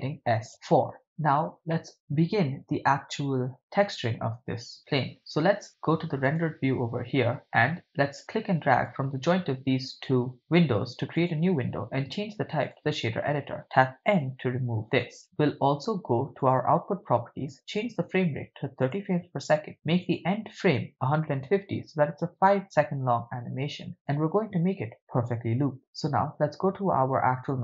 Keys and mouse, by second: 0.5 Return, 1.8 middle click, 6.5 click, 8.9-10.7 drag, 11.2-12.8 drag, 14.2 n, 16.4 click, 17.7-19.1 drag, 20.0-22.4 drag, 27.4 click.